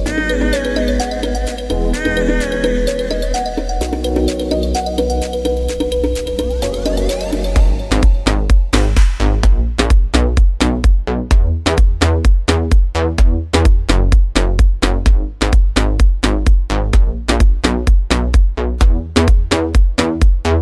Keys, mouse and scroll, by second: 5.4 click, 8.1-20.6 drag.